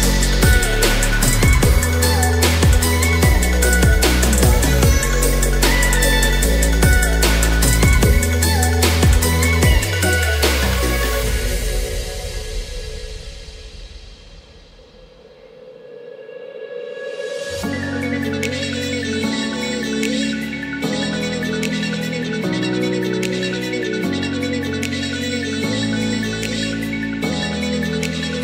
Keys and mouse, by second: 5.5 s, 5.7 y, 6.9-7.5 drag, 8.4 s, 8.9 x, 10.0-10.7 drag, 11.3 s, 11.9 y, 13.0-13.5 middle drag, 14.2 s, 14.3 y, 14.9 click, 15.1-16.0 middle drag, 16.4 Tab, 16.6 middle click, 17.4 3, 17.8 click, 18.4 middle click, 19.2 shift+middle click, 20.2 e, 23.0 click, 23.2-23.9 middle drag, 24.2 a, 24.7-25.0 shift+middle drag, 25.1-25.7 middle drag, 25.9-26.3 shift+middle drag, 26.7-27.1 middle drag, 27.5 middle click.